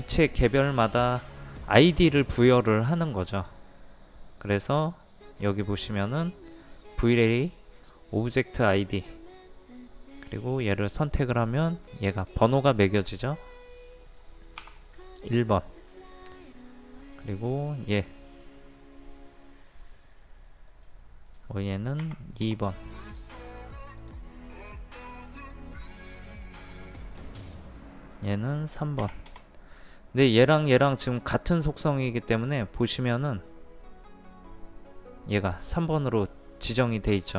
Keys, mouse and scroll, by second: 10.6-11.6 drag, 14.6 KP_1, 16.2 click, 17.9 right click, 20.7 click, 22.0 KP_2, 24.0 click, 24.5 right click, 27.4 click, 29.0 KP_3, 32.4 right click.